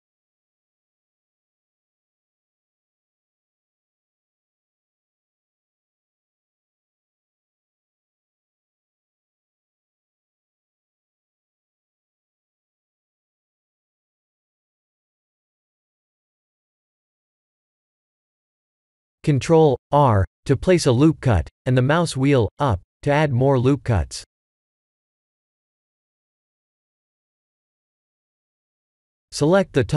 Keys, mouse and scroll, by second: 1.1 Tab, 2.2 3, 2.6 click, 3.6 g, 7.5 Tab, 7.8 middle click, 10.7 middle click, 10.9 click, 11.6 middle click, 12.3 middle click, 12.6 shift+z, 13.7 click, 14.7 s, 18.0 right click, 19.2 Tab, 24.3 click, 25.7 click, 28.0 middle click, 28.8 3, 29.2 click.